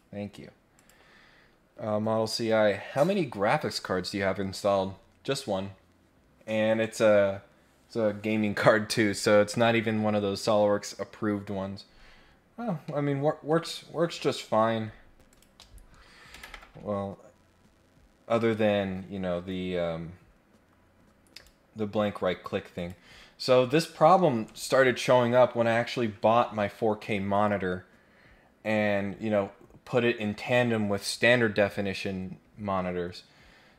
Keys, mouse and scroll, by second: 0.7 click, 12.2 scroll up 1, 12.5 scroll down 1, 12.8 middle click, 13.4 scroll up 1, 13.7 scroll down 1, 14.5-15.0 scroll up 1, 15.0 scroll down 1, 15.3 click, 21.3 right click, 22.7 click.